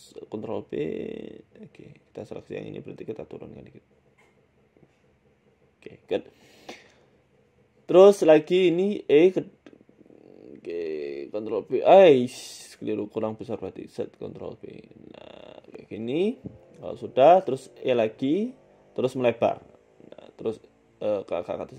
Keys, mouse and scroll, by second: 0.2 ctrl+b, 2.3 a, 2.4 a, 2.7 alt+shift+Right, 3.6 g, 4.8 s, 7.4 shift+middle click, 8.1 click, 9.4 e, 10.1 s, 11.3 ctrl+b, 13.7 s, 14.6 ctrl+b, 16.2 Tab, 16.7 Tab, 17.2 click, 18.1 shift+middle click, 18.4 e, 19.6 s, 20.6 g.